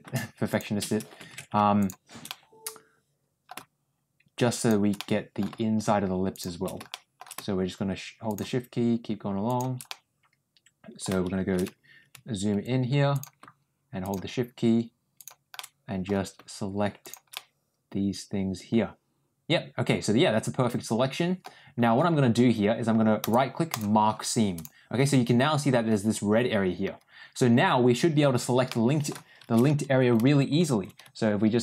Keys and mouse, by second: 0.4 shift+click, 1.7 shift+click, 2.2-3.4 middle drag, 4.9 ctrl+middle click, 6.8 shift+middle click, 9.3 shift+click, 9.8-10.9 middle drag, 15.0 shift+click, 15.4 shift+middle click, 17.2-21.3 middle drag, 23.2 right click, 28.6 middle click.